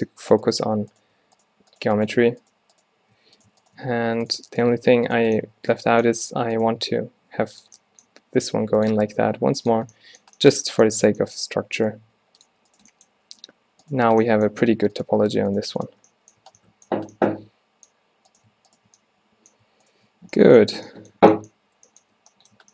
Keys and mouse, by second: 0.7 f, 3.3 f, 3.9 f, 4.8 f, 6.5 e, 7.0 s, 7.6 drag, 8.2 g, 9.4 g, 11.3 click, 11.6 g, 12.1 s, 12.5-13.0 drag, 12.6 g, 13.6 z, 14.6 z, 15.3 z, 16.5 a, 17.0 a, 20.3 z, 20.8 z, 21.8 z.